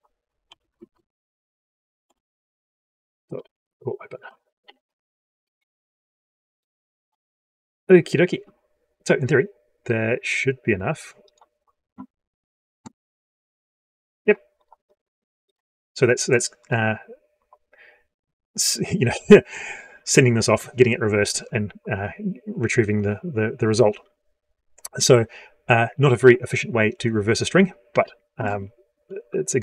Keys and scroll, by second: 0.6 ctrl+space, 6.8 F12.